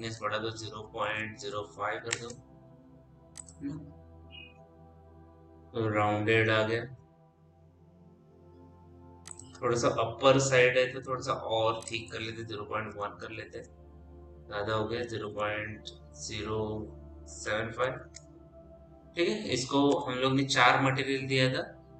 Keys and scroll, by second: 1.3 KP_0, 1.7 KP_5, 2.0 Return, 12.6 ·, 13.0 KP_1, 13.4 Return, 14.9 KP_0, 15.6 KP_Decimal, 17.2 KP_7, 17.8 Return, 19.7 m.